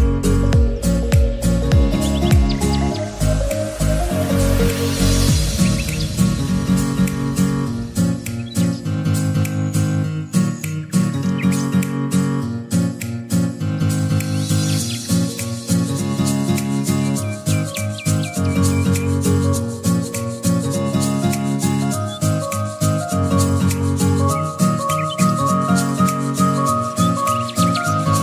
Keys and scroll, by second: 14.3-15.2 typing.